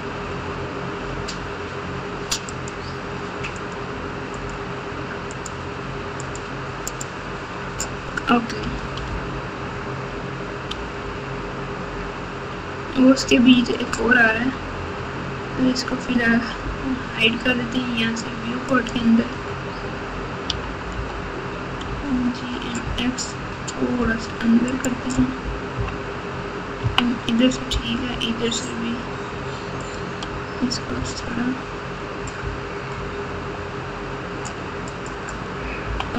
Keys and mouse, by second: 2.5 click, 3.5 click, 4.3 click, 5.3 click, 6.2 click, 6.8 click, 8.6 g, 18.7 click, 20.4 g, 25.7 KP_1, 26.8 KP_3, 29.8 click, 30.9 g, 35.8 KP_4.